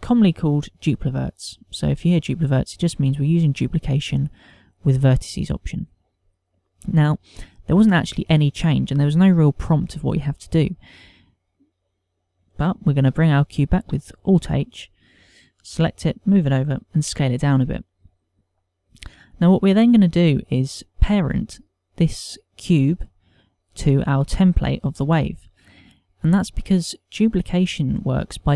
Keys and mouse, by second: 14.2 h, 14.9 alt+h, 15.7 click, 16.6 g, 17.1 click, 17.9 s, 19.2 click, 28.0 click.